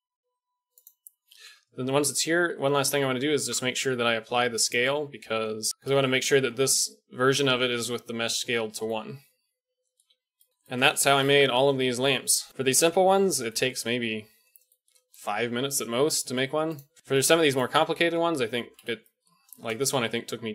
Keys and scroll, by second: 1.4 KP_1, 3.4 ctrl+a, 10.1 a, 10.5 shift+KP_1, 19.2 KP_Decimal.